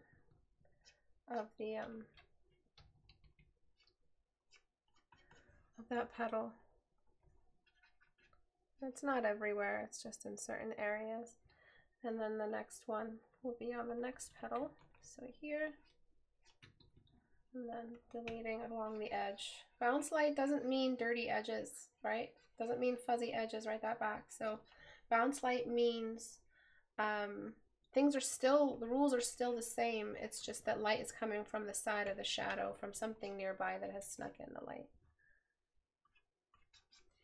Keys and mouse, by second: 12.6 right click, 17.3 right click, 31.0 right click.